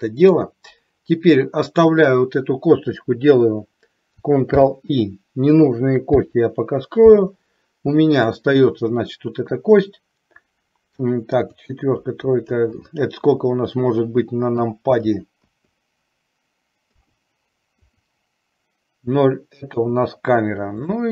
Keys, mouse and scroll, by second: 4.7 ctrl+i, 6.3 h, 8.4 click, 11.7 KP_4, 12.1 KP_5, 12.6 KP_6, 13.3 KP_7, 14.7 KP_7, 15.0 KP_8, 15.7 KP_9, 16.9 KP_9, 19.8 KP_0, 21.0-21.1 middle drag.